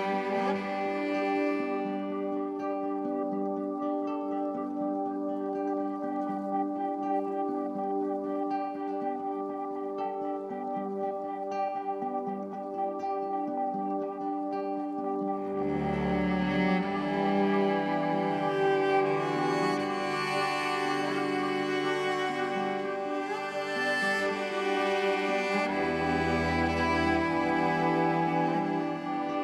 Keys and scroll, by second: 5.9 ctrl+shift+e.